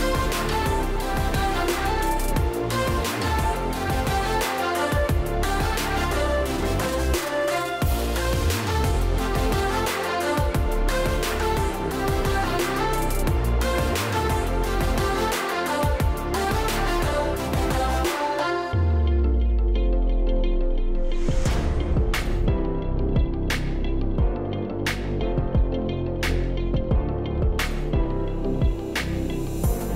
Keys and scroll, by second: 15.8 space, 23.2 space.